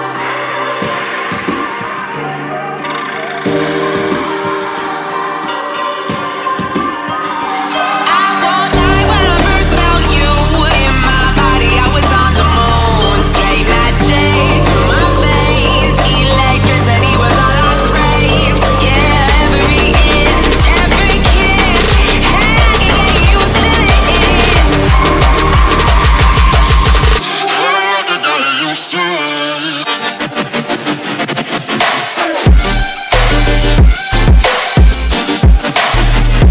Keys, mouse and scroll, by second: 0.2-2.7 typing, 5.7 click, 7.0 F10, 7.2 click, 8.8 right click, 9.8 click, 12.7 ctrl+x, 14.1 click, 15.8 right click, 16.8 click, 21.7 ctrl+v, 23.5-24.5 drag, 32.3-32.8 scroll down 1, 32.9 right click, 33.3-35.0 typing, 34.8 click, 36.2 click.